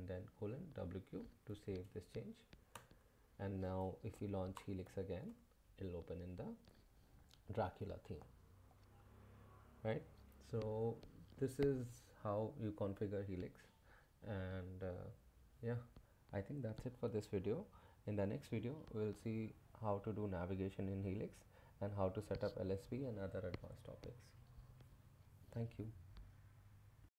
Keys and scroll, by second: 0.1-1.2 typing, 2.7 Return, 4.1-5.5 typing.